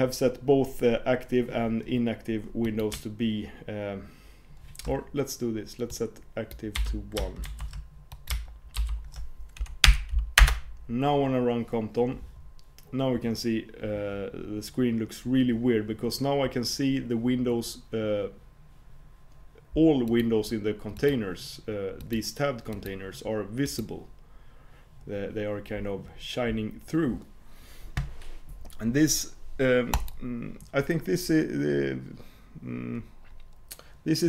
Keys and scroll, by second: 10.5 alt+super+Return.